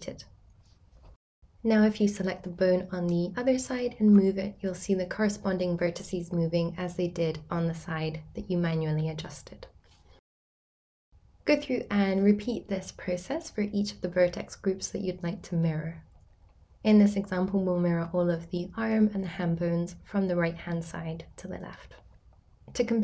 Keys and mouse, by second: 0.2 BackSpace, 3.1 r, 4.7 right click, 6.0 ctrl+click, 6.6 r, 8.3 right click, 10.3-11.9 drag, 12.5-16.7 drag, 13.5 BackSpace, 13.6 BackSpace, 13.7 BackSpace, 17.1-17.8 drag, 20.0-23.0 drag.